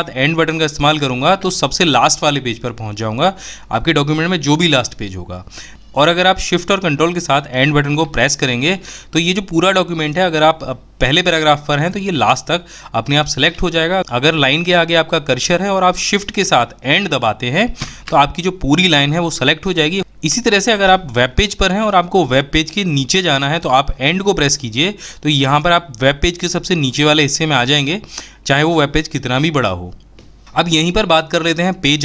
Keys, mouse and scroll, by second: 14.7 shift+Return.